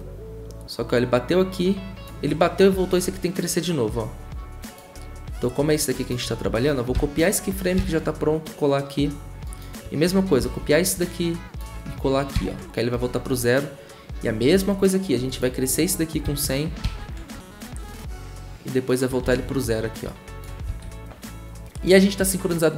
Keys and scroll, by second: 6.9 ctrl+c, 7.7 ctrl+v, 10.4 ctrl+c, 12.3 ctrl+v, 16.2 ctrl+c, 16.8 ctrl+v, 19.2 ctrl+c, 20.7 ctrl+v.